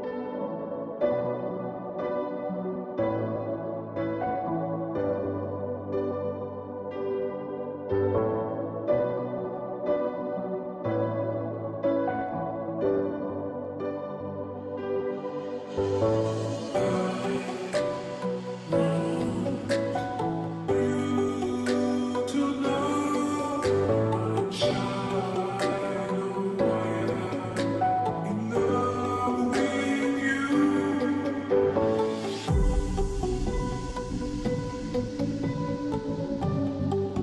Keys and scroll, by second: 29.0-29.7 space, 31.8 ctrl+z, 33.6 ctrl+shift+i, 34.8 Delete, 35.7 ctrl+d, 36.3-37.2 space.